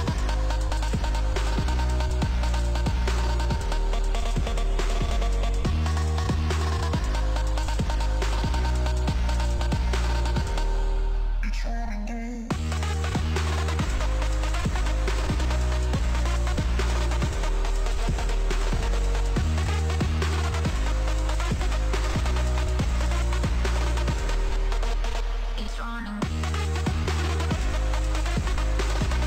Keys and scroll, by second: 2.1 ctrl+space, 2.8 p, 3.0 o, 3.1 l, 3.2 o, 4.3 BackSpace, 10.4 ctrl+space, 11.5 m, 11.6 o, 11.8 t, 26.5 ctrl+space, 27.4 p, 27.6 o.